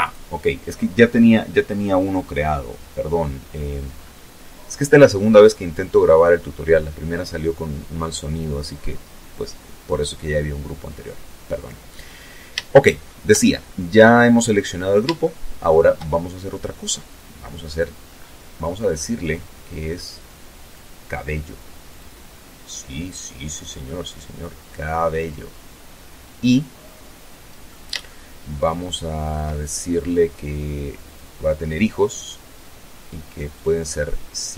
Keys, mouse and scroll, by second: 0.2-1.0 scroll up 2, 1.2-1.7 scroll down 2, 1.7-2.1 scroll down 2, 2.3-4.4 scroll up 2, 11.0 shift+middle click, 13.6 shift+middle click, 16.5-18.3 scroll up 8, 18.9 click, 20.2 click, 21.8-22.1 scroll down 1, 22.3-26.3 middle drag, 26.4-27.8 shift+middle drag, 27.8-28.5 shift+scroll down 1, 29.4 click, 31.8 click.